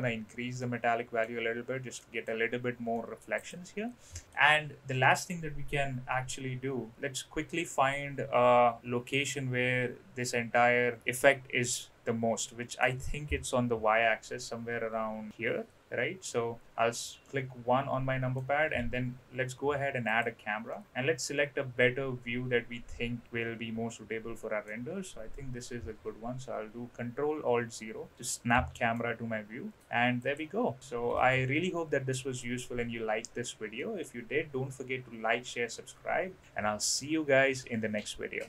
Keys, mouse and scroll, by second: 0.6-1.2 middle drag, 1.9-2.2 middle drag, 2.9 middle click, 3.4 click, 4.2 middle click, 4.9 middle click, 6.0 KP_3, 6.9-9.3 middle drag, 12.4 middle click, 13.7 KP_3, 14.7 KP_1, 17.2-18.4 middle drag, 18.8 shift+a, 20.7-24.8 middle drag, 25.8 ctrl+alt+KP_0, 28.9 g, 31.1 ctrl+t, 32.4-33.3 drag, 33.7 middle click.